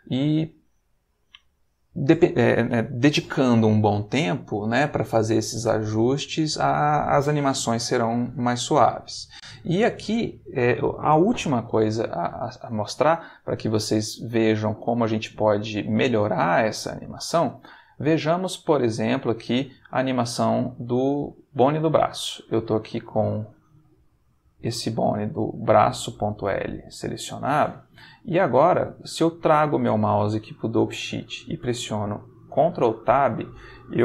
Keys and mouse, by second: 8.5 click, 14.4 ctrl+middle click, 17.0 click, 17.9 shift+middle click, 18.4 shift+middle click, 19.4 click, 20.9 click, 23.4 ctrl+Tab, 23.8 ctrl+click, 27.6 middle click, 32.9 ctrl+Tab.